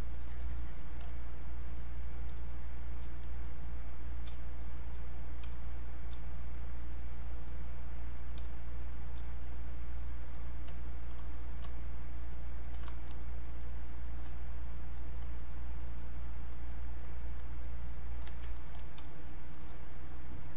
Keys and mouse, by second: 2.4 space, 2.8 click, 2.9 space, 3.2 click, 4.3 space, 4.7 click, 4.8 space, 5.9 click, 6.0 space, 6.4 click, 8.4 space, 8.8 click, 8.9 space, 9.3 click, 13.6 click, 19.0 space, 19.5 click, 19.9 click.